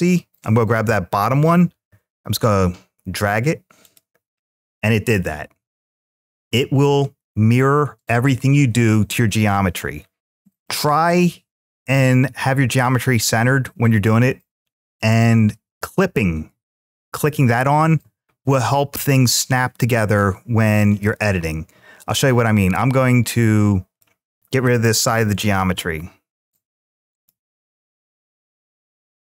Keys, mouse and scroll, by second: 1.5 g, 3.7 click, 4.3-6.6 middle drag, 10.2 middle click, 14.8 click, 19.9 middle click, 22.4 click, 23.1 click, 25.0 x.